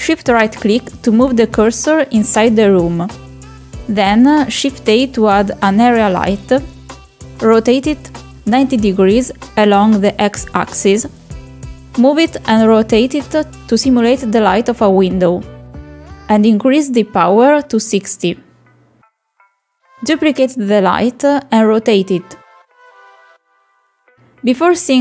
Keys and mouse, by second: 0.3 shift+a, 3.3 r, 6.2 click, 7.5 middle click, 7.9 KP_7, 8.8 shift+middle drag, 10.1 click, 11.4 click, 12.1 g, 14.9 r, 19.3 click, 19.8 click, 21.5 shift+d, 23.0 r, 24.9-25.0 middle drag.